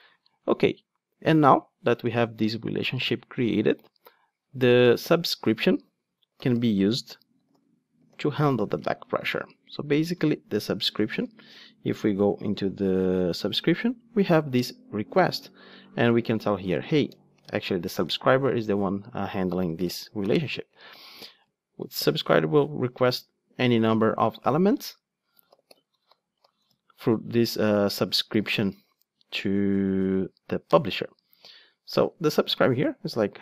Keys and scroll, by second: 15.4 ctrl+Tab.